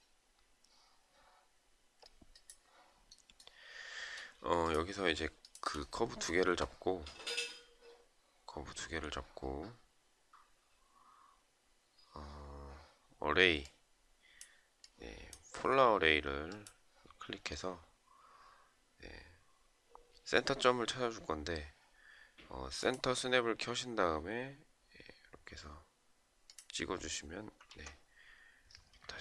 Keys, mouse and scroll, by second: 4.7 shift+click, 28.3 Escape.